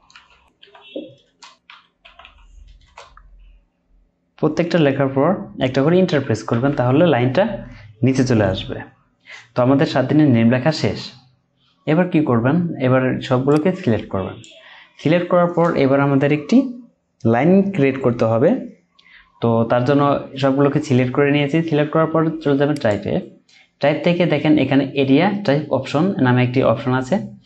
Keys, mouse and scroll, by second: 0.1-0.6 typing, 1.2 Return, 1.7-2.2 typing, 2.8 Return, 6.5 typing, 8.0 typing.